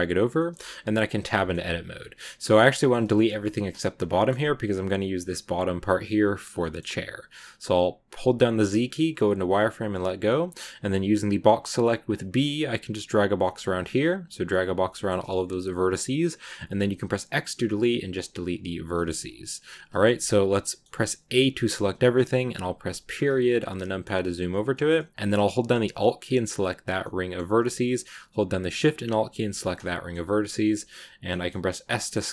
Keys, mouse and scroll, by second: 0.2 shift+middle click, 0.6 Tab, 1.2-2.3 shift+middle drag, 2.3 a, 4.0-6.4 shift+middle drag, 6.4 shift+scroll up 1, 6.5-8.1 shift+middle drag, 8.1 z, 14.8 shift+middle click, 15.6 x, 20.5 middle click, 21.1 a, 22.9 KP_Decimal, 23.5-24.6 scroll up 2, 23.6 middle click, 24.6 middle click, 26.1 alt+right click, 26.8-29.2 alt+scroll up 2, 26.9 middle click, 29.2 alt+shift+right click, 29.5 scroll down 2, 29.7-31.1 middle drag, 31.1-31.7 scroll up 2, 31.2 middle click, 31.7 s.